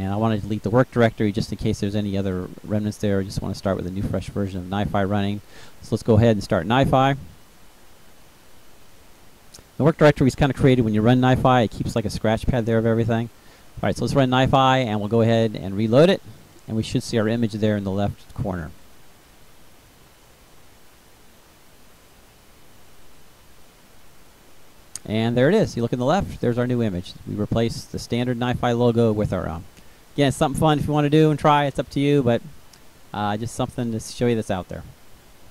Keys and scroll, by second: 0.2 Delete.